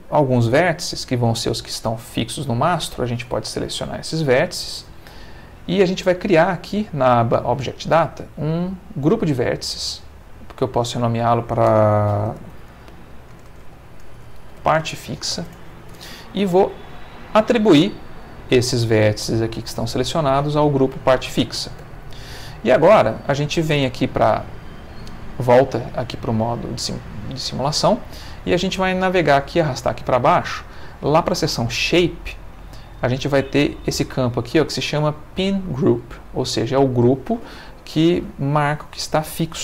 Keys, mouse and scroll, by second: 3.1 click, 5.0 click, 8.8 click, 10.4 click, 10.8 click, 12.4-15.3 typing, 15.5 shift+Return, 17.8 click, 21.8 Tab, 25.5 click, 28.1-29.6 middle drag, 29.6 scroll up 1, 29.9 middle click, 30.5 scroll up 1, 31.8 click, 32.3 middle click, 33.1-36.0 scroll up 1.